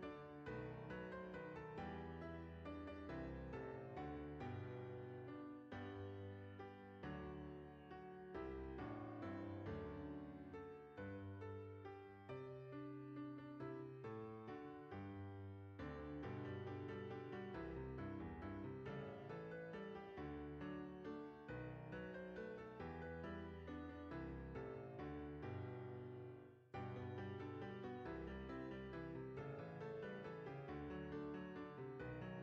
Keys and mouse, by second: 3.2 click, 4.2 alt+shift+click, 5.1 s, 7.7 click, 8.9 alt+shift+click, 9.6 s, 11.6 click, 12.7 alt+shift+click, 13.4 s, 14.0 click, 14.6 ctrl+b, 18.7 click, 19.1 Tab, 19.7 right click, 20.1 click, 21.3 click, 22.5 click, 23.9 click, 27.1 click, 28.1 middle click, 29.9 click.